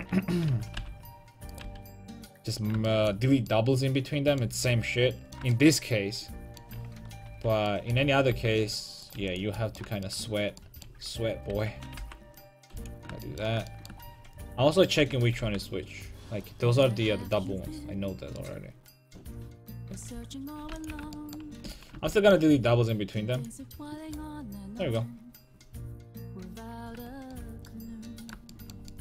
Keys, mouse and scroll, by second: 0.8 g, 1.7 x, 2.5 middle click, 3.8 middle click, 4.0 middle click, 4.5-6.6 middle drag, 7.3 l, 7.7 middle click, 8.3 g, 9.2 x, 11.5 l, 12.0 g, 12.7 right click, 12.7 x, 13.2-14.7 drag, 15.0 l, 15.6 g, 16.9-18.6 drag, 17.1 a, 18.8 click, 19.0 click, 20.2-21.2 middle drag, 20.2 l, 20.7 x, 21.7 a, 23.4-25.3 drag, 27.0 Tab.